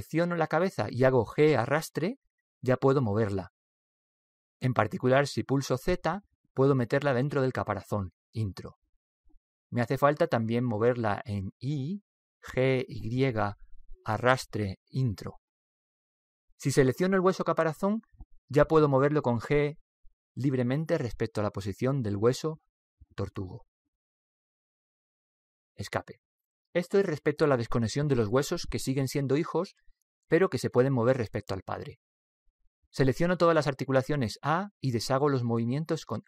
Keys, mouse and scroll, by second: 1.5-4.8 right drag, 5.4 g, 10.1-12.0 middle drag, 12.8 g, 16.6-18.8 middle drag, 18.8 right click, 20.0 g, 34.2 a, 34.9 a.